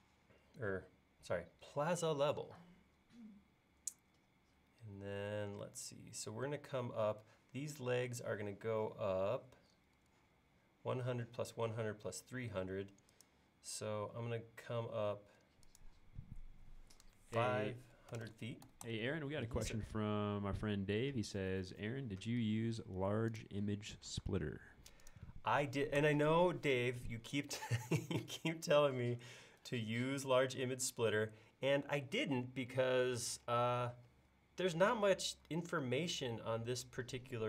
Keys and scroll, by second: 0.0 space, 14.2 l, 17.4-18.2 typing, 24.3 space, 26.1 BackSpace.